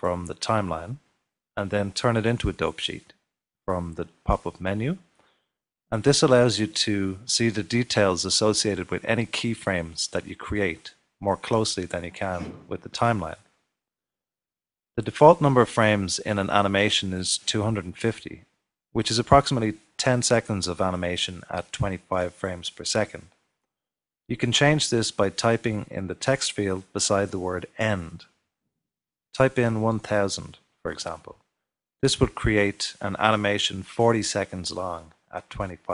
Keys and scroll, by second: 28.3-30.1 typing, 30.3 Return.